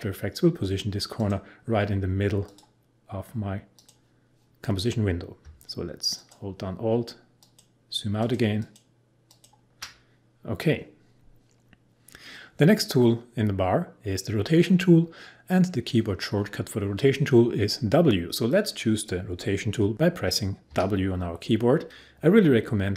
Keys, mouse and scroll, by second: 1.1 click, 20.7 w.